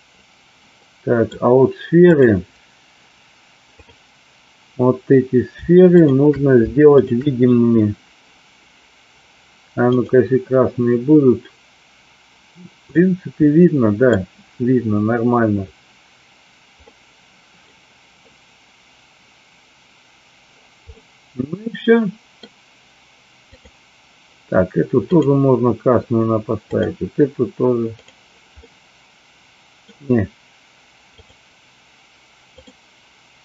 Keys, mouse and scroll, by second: 0.7 middle click, 2.1 click, 3.7 click, 9.9 click, 13.0-14.1 middle drag, 16.9-17.7 middle drag, 20.9-22.3 middle drag, 23.4 click, 26.6 click, 27.8 click, 28.6-29.8 middle drag, 31.1 click, 32.5 click.